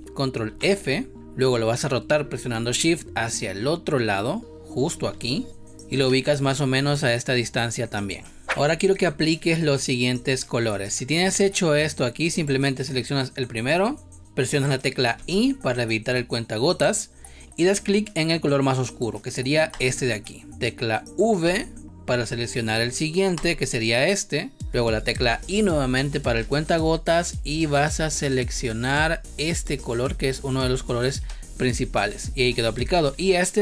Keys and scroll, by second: 0.4 ctrl+f, 8.4 space, 15.0 i, 21.3 v, 26.3 space, 31.2 space, 32.8 v.